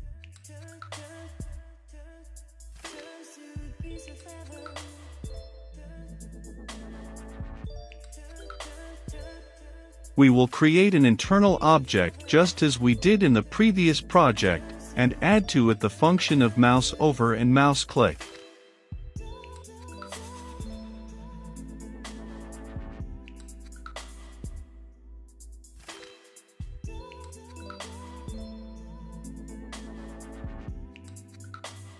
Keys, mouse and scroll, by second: 0.1 Return, 1.4-5.5 typing, 1.7 Return, 2.7 click, 6.1 click, 6.4 ctrl+c, 6.7 click, 6.9 Return, 6.9 ctrl+v, 7.2 click, 8.7 click, 9.4 Return, 9.5-11.7 typing, 12.6 Return, 14.4 Caps_Lock, 14.6-19.6 typing, 19.9 Return, 20.2 Caps_Lock, 20.7-21.4 typing, 21.2 Return, 21.9 click, 22.1 Return, 22.2 click, 23.1-24.3 typing, 23.4 Return, 24.5 Left, 25.2 click, 25.5 i, 25.6 f, 26.2 shift+9, 26.8 b, 27.2 Return, 28.1-29.4 typing, 28.9 Return, 29.9 Down, 30.1 Return, 30.6-31.9 drag.